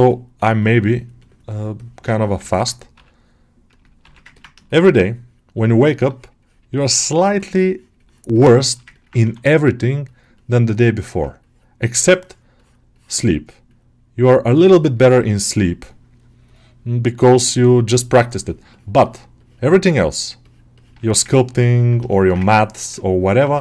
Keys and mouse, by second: 2.3 ctrl+middle click, 2.8 r, 3.9 ctrl+r, 4.2 ctrl+alt+middle click, 5.4-6.9 shift+drag, 7.2 shift+middle click, 8.5 alt+shift+middle click, 8.8 ctrl+alt+middle click, 9.5 middle click, 9.9-13.5 middle drag, 13.5-19.3 ctrl+drag, 19.7-22.0 ctrl+drag, 22.0 shift+middle click, 22.9 middle click, 23.2 ctrl+middle click.